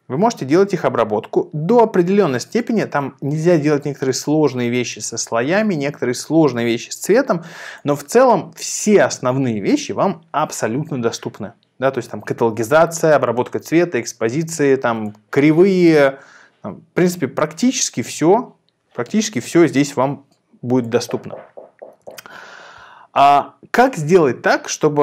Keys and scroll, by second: 22.0 super+r.